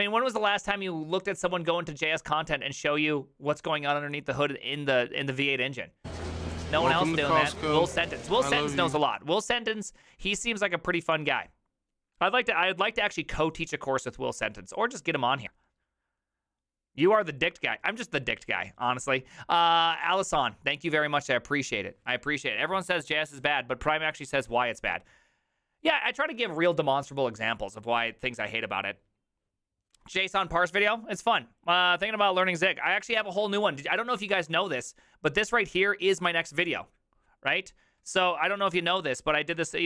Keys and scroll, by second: 33.3 alt+{, 34.3 alt+[, 38.8 alt+{, 39.6 ctrl+c, 39.7 ctrl+c.